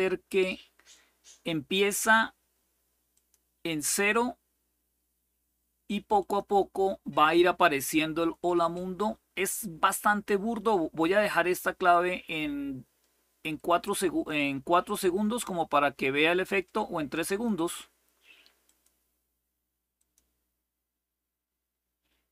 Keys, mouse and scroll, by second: 0.0 click, 3.1 click, 5.9 click, 11.2-17.2 drag, 18.4 click, 19.7 click.